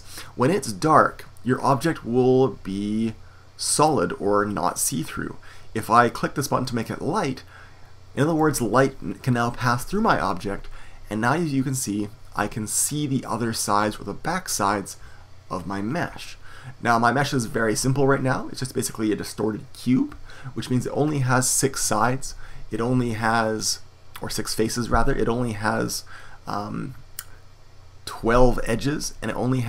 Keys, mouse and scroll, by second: 1.5-8.2 middle drag, 8.2-12.8 drag, 12.8-29.6 middle drag.